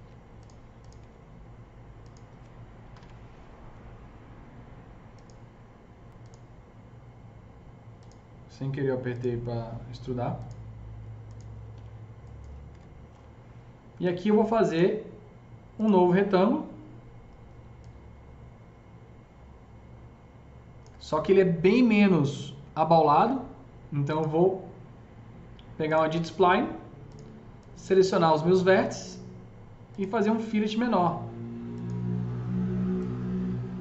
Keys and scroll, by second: 0.3 ctrl+z, 0.8 F3, 2.5-3.4 typing, 4.7-5.5 typing, 11.2-12.1 typing, 12.5 F3.